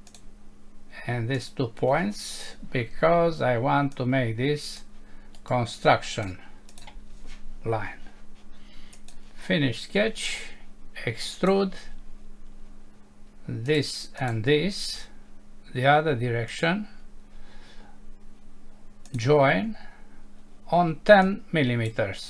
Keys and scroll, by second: 2.5 Escape.